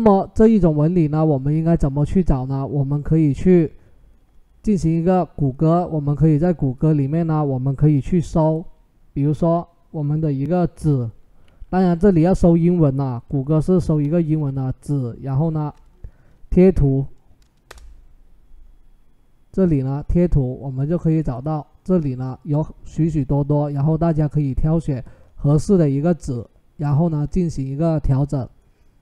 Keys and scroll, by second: 11.6-12.5 typing, 13.7-14.6 typing, 17.5 Return.